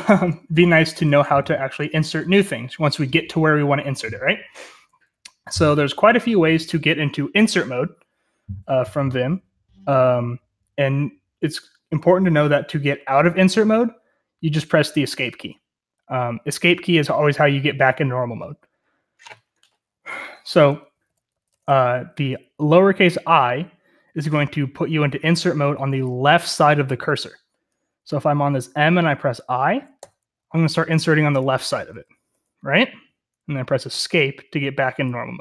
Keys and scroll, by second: 0.0-5.1 typing, 20.6-22.1 typing, 29.9-32.1 typing, 33.9 Escape.